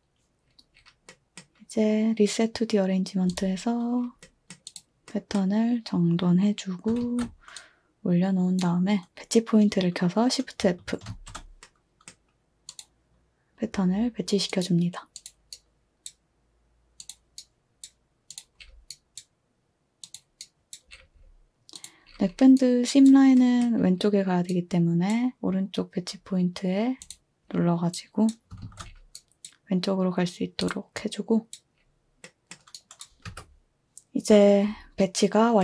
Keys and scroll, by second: 7.0 ctrl+a, 11.1 f, 28.6 f, 33.3 2.